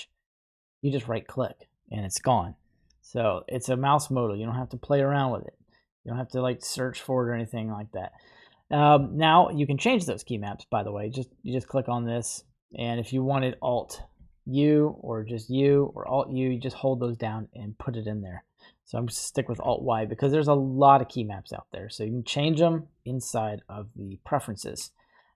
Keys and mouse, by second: 0.5 right click, 5.1-6.8 drag.